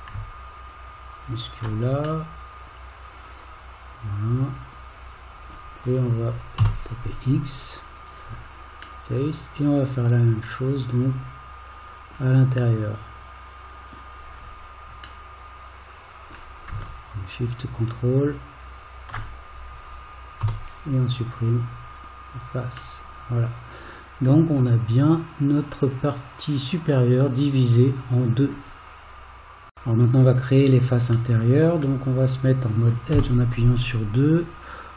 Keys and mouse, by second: 1.1 ctrl+shift+click, 2.3-5.5 middle drag, 6.6 x, 9.1-12.1 middle drag, 13.8 click, 15.3-16.3 middle drag, 20.5 x, 23.0-28.5 middle drag, 31.3 middle click, 33.1 2.